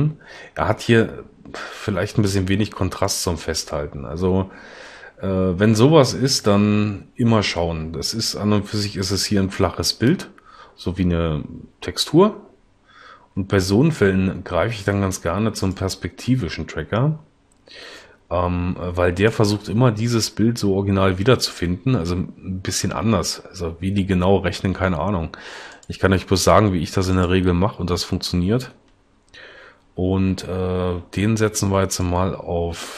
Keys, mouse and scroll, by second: 13.2 s.